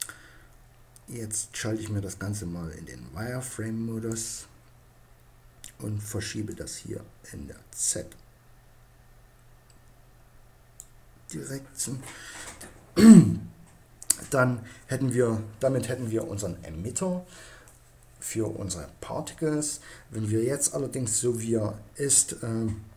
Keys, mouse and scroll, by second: 1.3-3.1 drag, 6.1-7.8 drag.